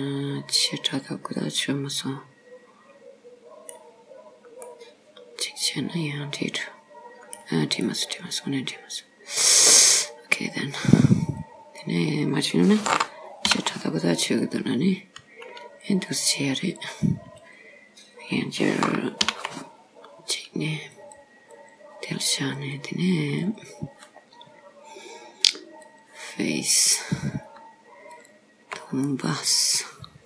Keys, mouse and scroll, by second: 4.1-4.7 scroll down 3, 4.7 middle click, 7.9 middle click, 10.7 scroll up 2, 11.5 click, 13.5 ctrl+r, 17.4 click, 19.3 ctrl+r, 22.6 click, 23.4 click, 25.9 click, 26.9 click, 28.2 shift+click, 29.2 middle click.